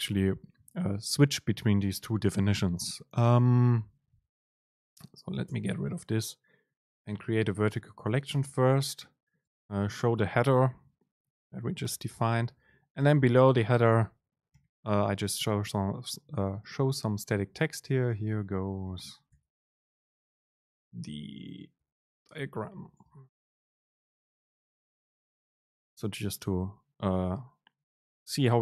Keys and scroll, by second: 4.7 BackSpace, 5.5 BackSpace, 5.6 super+space, 12.7 End, 17.9 BackSpace.